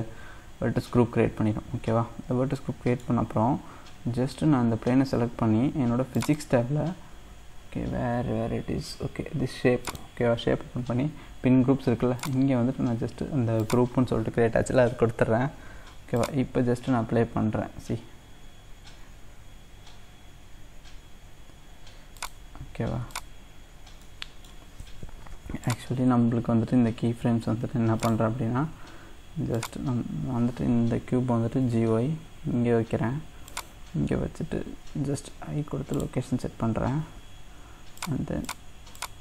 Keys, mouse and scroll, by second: 2.3 scroll up 2, 2.6-5.6 middle drag, 6.2 click, 6.7-9.9 scroll down 2, 9.9-15.2 drag, 16.2-24.0 drag, 24.0-25.7 middle drag, 25.7-27.2 drag, 27.2 x, 29.5-31.5 drag, 31.5 g, 35.2 i, 38.0 click, 38.5-39.2 drag.